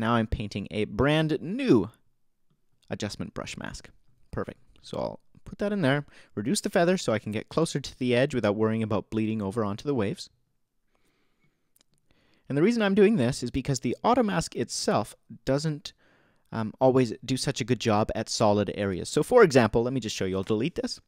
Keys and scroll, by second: 20.4 BackSpace.